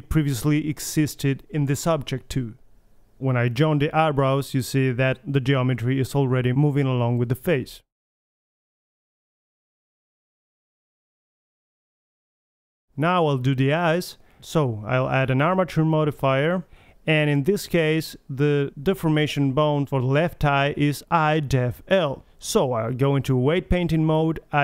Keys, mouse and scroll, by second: 1.0-5.0 middle drag, 5.4 ctrl+j, 6.0 a, 6.2-6.8 drag, 6.9 g, 7.1 click, 7.2 r, 7.9 g, 8.8 middle drag, 9.1 a, 9.2 a, 9.3 alt+g, 9.4 alt+r, 9.5 alt+s, 9.5 a, 9.5 KP_1, 10.8-11.2 middle drag, 12.3-13.2 middle drag, 13.2 KP_1, 13.7 Return, 14.1-16.5 middle drag, 16.7-17.8 drag, 20.5-21.8 middle drag, 22.7 click, 23.3-24.5 middle drag.